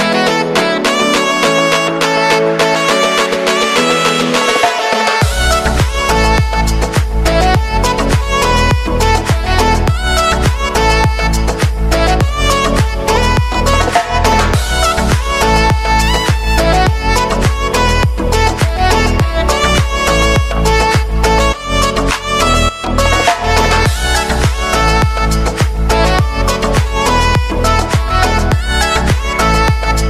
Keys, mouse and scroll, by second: 0.3 click, 1.1 space, 5.2 space, 7.0 click, 7.0 click, 7.6 ctrl+d, 8.2-11.5 drag, 12.0 ctrl+d, 12.5-17.5 drag, 20.2 space, 21.4 click, 21.9 space, 25.0 click, 25.5 ctrl+d, 25.9-30.0 drag.